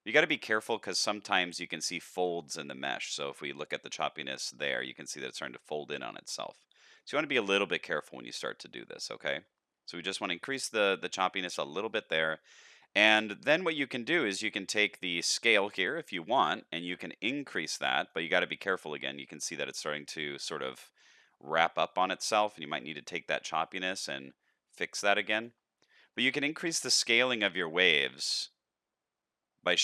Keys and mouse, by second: 0.5 shift+middle click, 1.2-2.3 middle drag, 3.3-9.3 shift+drag, 9.9 middle click, 15.7-18.1 shift+drag, 18.6-19.4 middle drag, 20.1-20.5 middle drag, 22.8-25.4 shift+drag, 25.9 middle click, 26.9-29.8 shift+drag.